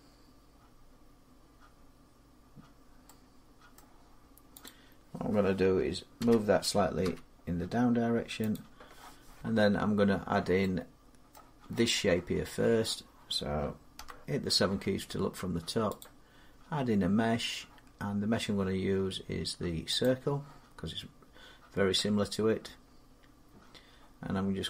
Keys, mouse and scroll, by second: 3.5 middle click, 4.4 click, 5.9 g, 6.8 z, 7.2 g, 7.7 z, 8.3 click, 10.4-11.1 typing, 11.1 middle click, 13.7 KP_7, 15.6 7, 15.8 click, 19.9 click, 24.5 click.